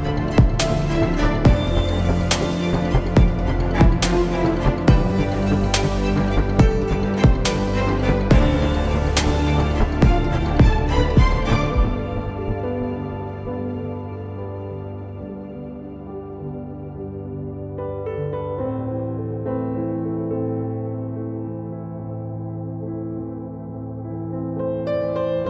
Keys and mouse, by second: 1.5 x, 3.5-6.1 drag, 7.1-11.2 drag, 18.8 ctrl+l, 22.4 s, 24.0-25.4 drag, 24.0 s.